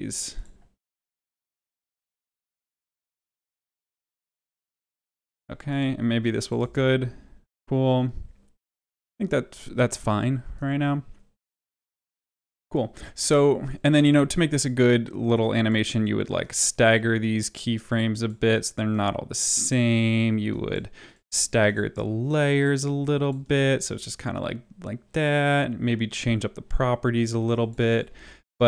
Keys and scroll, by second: 3.1 ctrl+v, 4.9 ctrl+v, 6.5 space, 12.0 space, 23.4 space, 28.0 ctrl+z.